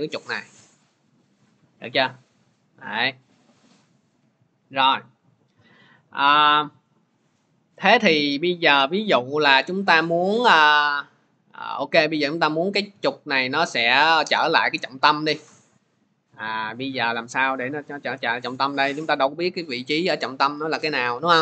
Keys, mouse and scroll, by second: 3.9 click, 5.0 ctrl+z, 6.3 ctrl+z, 19.1 click.